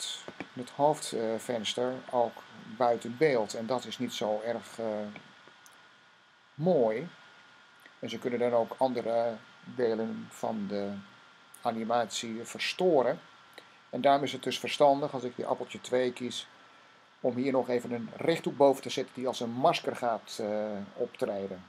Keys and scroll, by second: 15.7 2.